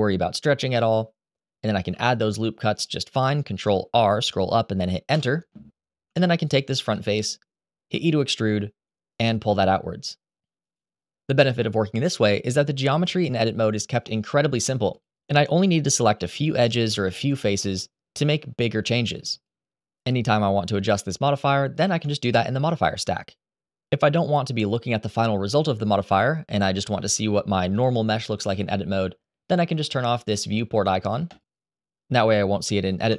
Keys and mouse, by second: 1.6 ctrl+r, 4.9 Return, 5.8 3, 6.7 click, 7.6 e, 10.3 click, 11.1 2, 13.2 click, 14.7 shift+click, 15.2 middle click, 16.2 Escape, 16.2 g, 16.2 x, 16.3 g, 16.6 y, 19.5 click, 21.6-24.9 shift+drag, 31.0 click, 32.8 Tab.